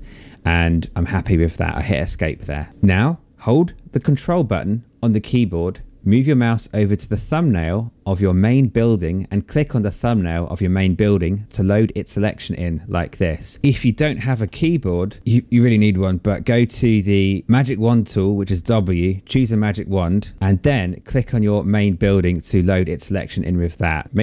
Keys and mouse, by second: 0.6 Escape, 7.9 ctrl+click, 15.2 click, 18.3 click, 19.7 ctrl+d, 20.7 click, 24.0 click.